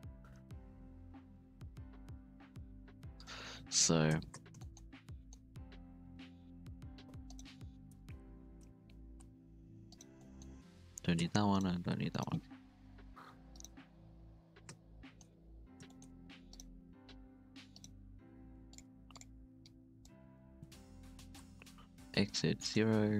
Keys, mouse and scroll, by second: 3.5-3.9 scroll down 2, 3.6 shift+middle click, 3.9 scroll up 1, 4.1 Tab, 4.3 z, 4.5 shift+middle drag, 4.7-5.1 scroll up 1, 5.1-5.5 shift+middle drag, 5.5-6.0 scroll down 1, 6.0-6.4 scroll down 1, 6.4 Tab, 6.6-6.9 scroll down 5, 6.9 z, 7.2 right click, 8.0 h, 9.1 alt+h, 9.5 alt+a, 9.9 right click, 10.0 scroll down 2, 10.1-11.2 middle drag, 11.2 h, 11.5 right click, 11.8 h, 12.1 right click, 12.7 KP_3, 13.2 scroll up 2, 13.5 right click, 13.7 Tab, 13.9 z, 14.1-14.5 scroll up 2, 14.5 alt+a, 14.7 z, 15.1 shift+middle click, 15.3-15.9 scroll up 3, 15.9 shift+middle click, 16.4-19.5 typing, 16.5 right click, 19.6 click, 21.1 s.